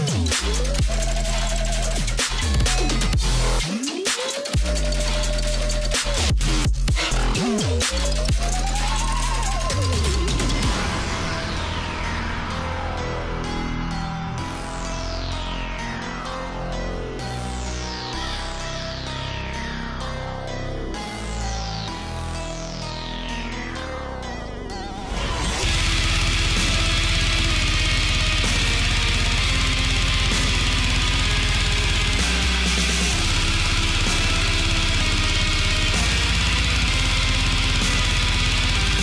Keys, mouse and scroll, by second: 0.7 shift+m, 1.2 alt+scroll up 1, 1.7-2.1 alt+scroll up 1, 3.0 alt+click, 3.4 alt+scroll down 1, 4.0 space, 4.1 click, 4.2 space, 4.5 alt+scroll up 1, 6.0 alt+click, 6.5-7.0 alt+scroll down 1, 7.0 click, 8.3 space, 8.4 click, 8.5 space, 9.5-9.9 alt+scroll up 1, 10.0 click, 10.9 Up, 12.8 click, 14.3 click, 15.0-15.7 alt+scroll up 1, 15.7-18.6 drag, 20.2 click, 22.4 click, 23.4 ctrl+shift+[, 24.3 ctrl+shift+[, 24.5 shift+click, 25.5 alt+scroll down 1, 25.6 click, 25.9 space, 26.7 click, 27.8 space, 27.9 click, 28.1 space, 29.3 click, 29.4-30.8 shift+drag, 32.5 click, 36.0 alt+scroll up 1, 36.5 click, 37.2 ctrl+shift+[, 37.6 click, 37.6 scroll down 1, 38.7 alt+scroll up 1, 38.8 alt+scroll down 1.